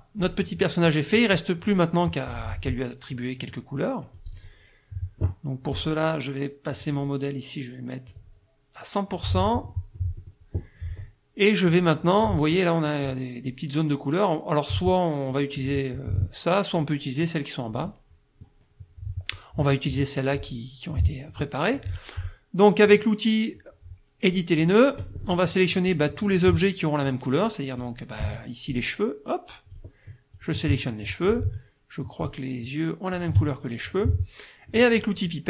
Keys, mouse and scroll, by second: 0.6 middle click, 3.5-4.6 drag, 6.8 click, 8.1-9.4 drag, 9.7 middle click, 12.2 middle click, 17.9 middle click, 20.4 click, 21.4 click, 24.6 click, 25.1 click, 27.8 click, 28.7 shift+click, 29.7 shift+click, 30.4 shift+click, 30.9 shift+middle click, 32.2 shift+click, 33.2 shift+click, 34.0 middle click.